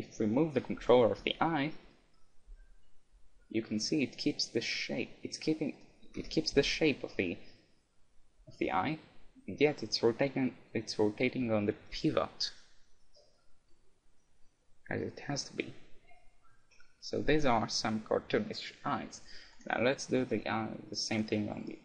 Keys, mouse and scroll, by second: 0.8 KP_1, 1.9-3.7 middle drag, 2.5 g, 5.8-7.9 right drag, 6.2 KP_1, 6.6 g, 19.7 right click, 20.2-21.8 middle drag.